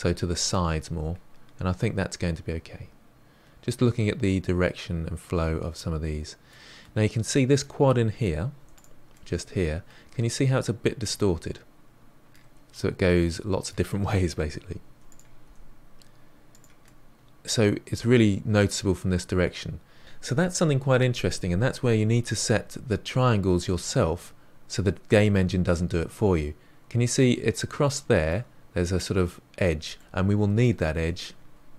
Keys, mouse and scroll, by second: 6.8-7.3 scroll up 1, 7.3-8.6 middle drag, 8.6 3, 8.7 click, 9.1-12.3 middle drag, 12.6-14.8 middle drag, 14.8 1, 15.0 click, 15.4 g, 16.8-18.5 middle drag, 23.6-26.6 middle drag, 29.9-31.7 middle drag.